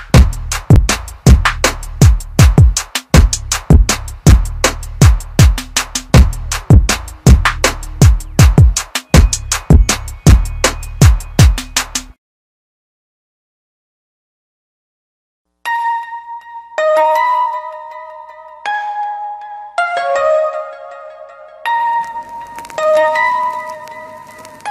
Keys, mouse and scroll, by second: 4.6 click, 4.9 r, 5.5 click, 5.6 r, 6.3 click, 6.5 r, 7.7 click, 7.9-11.2 typing, 8.5 click, 9.2 click, 9.7 click, 10.4 click, 11.0 click, 12.2 click, 12.3 r, 12.8 click, 13.0 r, 13.9 click, 14.1 r, 14.6 click, 14.8 r, 16.4 click, 16.6 r, 17.1 click, 17.2 ctrl+r, 17.9 ctrl+click, 18.0 r, 18.8 click, 19.0 r, 19.5 click, 19.6 r, 20.6 click, 20.8 r, 21.6 click, 21.7 r.